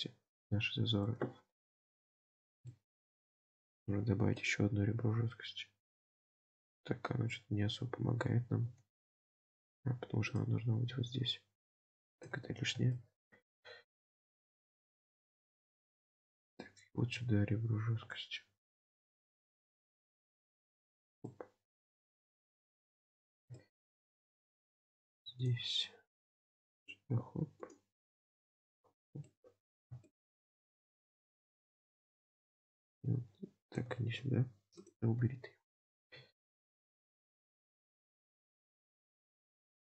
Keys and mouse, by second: 1.7 KP_7, 2.8 shift+middle click, 4.0 ctrl+r, 7.2 ctrl+z, 12.5 ctrl+z, 13.0 shift+middle click, 15.0-16.6 middle drag, 21.3-23.3 middle drag, 23.7 shift+middle click, 24.2 middle click, 29.2 middle click, 30.1 shift+middle click, 35.4 ctrl+z, 37.7 ctrl+z, 38.5 ctrl+r.